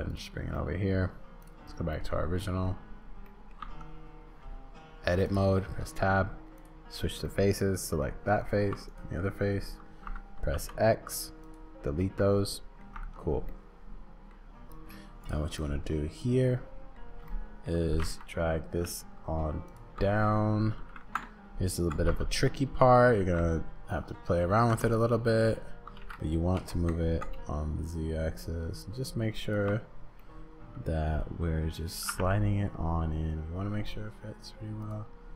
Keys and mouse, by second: 1.9 click, 2.0 middle click, 3.3 middle click, 3.6 Tab, 5.2 click, 6.6 click, 7.2 middle click, 8.4 shift+click, 10.5-11.5 drag, 10.5 x, 12.0 click, 12.9 Tab, 13.5 click, 13.7 middle click, 15.6-16.9 drag, 17.2 shift+click, 17.8 g, 20.1 middle click, 20.7 g, 22.4 middle click, 23.2 g, 30.2-31.9 drag, 32.0 g.